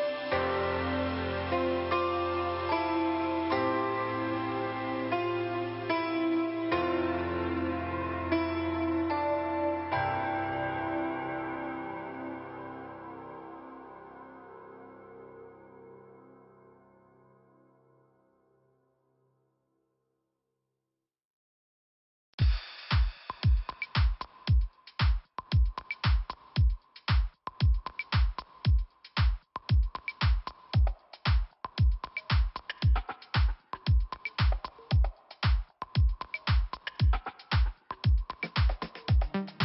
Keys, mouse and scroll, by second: 2.8 middle click, 4.9 click, 13.3 click, 14.1 click, 15.4 click, 16.1 click, 16.4 click, 17.5 click, 18.8 middle click, 19.3 click, 19.8-20.7 scroll up 1, 20.7 click, 20.8 click, 21.0 click, 21.1 click, 21.7 click, 23.2 click, 23.3 click, 24.1 click, 24.2 click, 24.9 click, 26.8-27.2 scroll down 2, 27.8-28.9 scroll up 2, 28.9 click, 29.7 click, 31.4 click, 32.0 click, 32.1 click, 32.5 click, 34.1 scroll down 1, 38.5 click, 39.0 click.